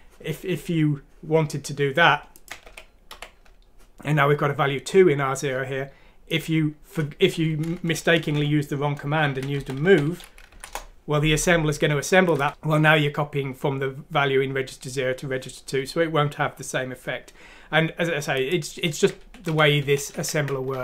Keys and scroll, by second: 2.6-3.1 typing, 7.7 Home, 8.2 Delete, 8.3 Delete, 9.2-10.3 typing, 10.5 F6, 10.7 Return, 19.2 ctrl+z, 19.4 ctrl+z, 19.8 ctrl+z, 20.1 ctrl+z, 20.7 ctrl+z.